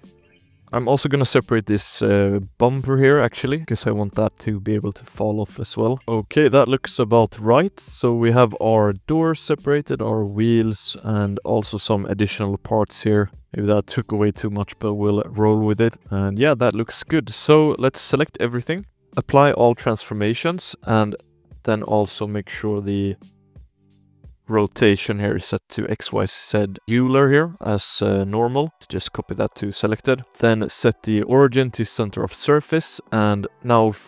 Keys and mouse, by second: 0.0-1.5 typing, 0.0 Tab, 0.1 click, 0.4 click, 0.5 shift+click, 2.3 click, 2.8 shift+click, 3.2 click, 4.1 shift+click, 5.2 shift+click, 5.6 click, 6.0 ctrl+s, 6.0 z, 6.0 KP_1, 6.1 click, 6.4 a, 6.9 alt+h, 7.3 alt+a, 7.6 ctrl+s, 7.8 click, 8.2-8.6 drag, 8.6 g, 9.4 click, 9.6 g, 10.5 click, 10.6 g, 11.3 drag, 11.7 shift+click, 12.2 click, 12.4 g, 13.4 g, 14.3 click, 15.1 shift+click, 15.3 drag, 15.9 click, 16.0 alt+a, 16.0 ctrl+s, 16.0 z, 16.2 click, 16.5 z, 16.8 shift+drag, 17.4 click, 18.1 z, 18.8 shift+drag, 18.9 ctrl+a, 19.8 drag, 20.1 n, 21.4 click, 22.2 click, 22.7 click, 23.8-25.0 drag, 26.2 click, 27.4-28.7 drag, 29.0 drag, 29.5 n, 29.7 drag, 30.2-31.2 shift+middle drag, 31.2 ctrl+a, 31.5 shift+click, 31.9 alt+a, 32.1 ctrl+s, 32.5 z, 33.0 click.